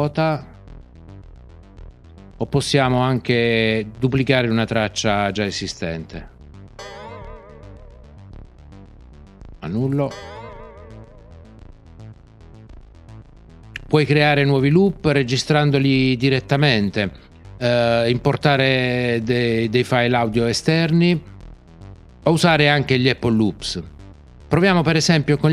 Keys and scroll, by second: 6.7 super+d, 10.0 super+z.